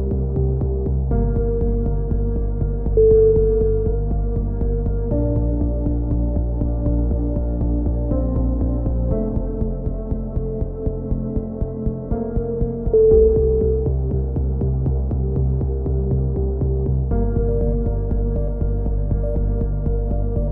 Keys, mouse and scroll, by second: 0.3 g, 3.8-5.6 middle drag, 4.0 a, 4.2 z, 9.5 KP_7, 9.9 z, 10.7 scroll up 1, 11.8-12.8 middle drag, 12.8-14.6 drag, 14.6-16.0 middle drag, 15.4 c, 16.3 z, 16.5 middle click, 17.0 click, 17.5 middle click, 19.0 KP_3, 19.4 z.